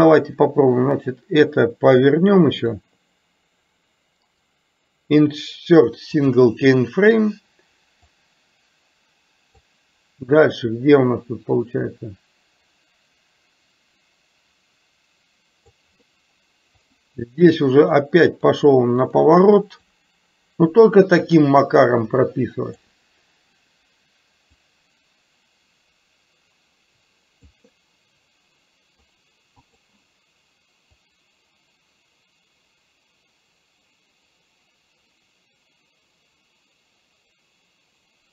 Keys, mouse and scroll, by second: 1.1-2.7 drag, 4.4-6.5 right drag, 8.2-9.9 drag, 11.2-15.7 drag, 16.9 click, 18.0 click, 19.9-23.0 drag, 24.7-27.7 drag, 29.2 right click, 31.1 click.